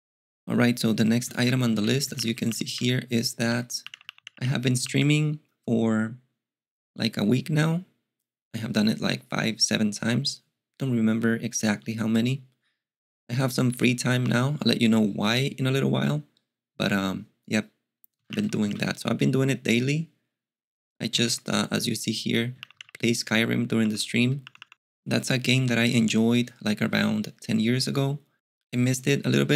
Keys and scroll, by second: 1.9-5.3 typing, 3.5 alt+x, 17.9-19.2 typing, 21.2 alt+x, 22.3-24.6 typing.